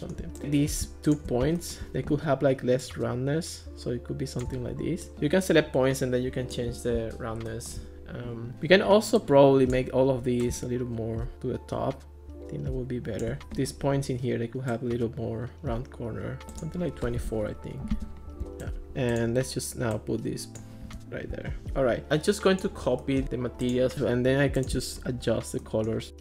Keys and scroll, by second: 17.0-17.8 typing, 18.9 Escape.